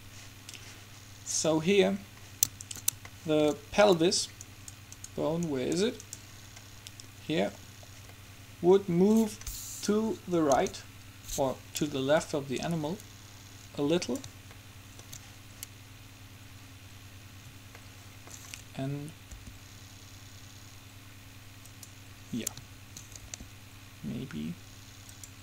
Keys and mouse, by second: 2.0-3.3 middle drag, 4.7 right click, 7.2-8.4 right drag, 10.7 KP_7, 12.4-14.0 drag, 14.7-17.9 middle drag, 18.0-21.3 middle drag, 19.5 r, 23.4 r.